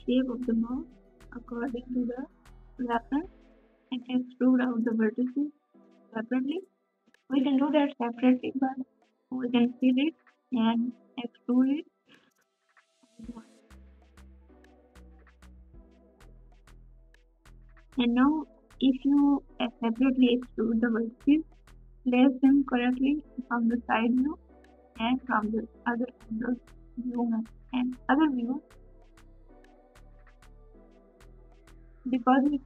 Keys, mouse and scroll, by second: 4.7 ctrl+KP_6, 4.9 ctrl+KP_8, 17.3 g, 17.5 g.